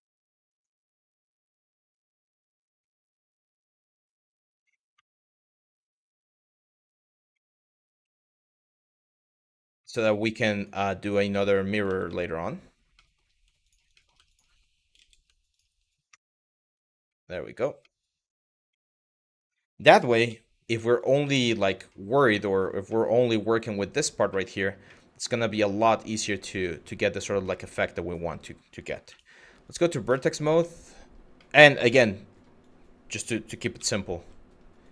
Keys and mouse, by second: 2.4-3.8 shift+drag, 7.1 middle click, 8.1 click, 8.4 shift+click, 9.4 Delete, 11.0 click, 11.5 ctrl+z, 11.7 ctrl+z, 12.6 middle click, 13.3 click, 13.6 middle click, 13.9 click, 15.1 shift+click, 15.7 Delete, 16.8 middle click, 17.5 middle click, 18.3 middle click, 19.9 z, 20.9 middle click, 22.1 middle click, 22.5 middle click, 24.0 middle click, 24.5-26.8 middle drag, 27.2 shift+middle click, 28.7 1, 29.3 click, 29.9 shift+middle click, 30.3 middle click, 31.0 middle click, 31.5 KP_1, 32.2 click, 33.4 z, 34.5-34.9 drag.